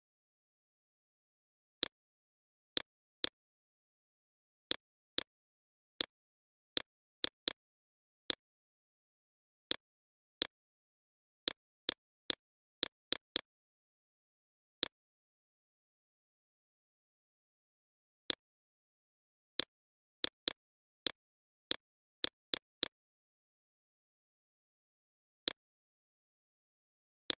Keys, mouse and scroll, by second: 1.2 right click, 1.6-7.2 drag, 8.9 ctrl+d, 9.2 click, 10.8-15.1 shift+drag, 16.1 click, 19.7 shift+click, 24.1 shift+click.